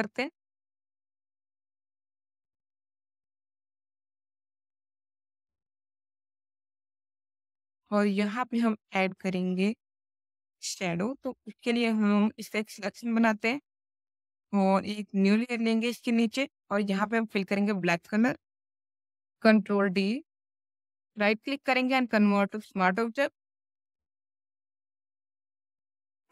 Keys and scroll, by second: 17.9 alt+BackSpace, 19.5 ctrl+d, 24.2 Left.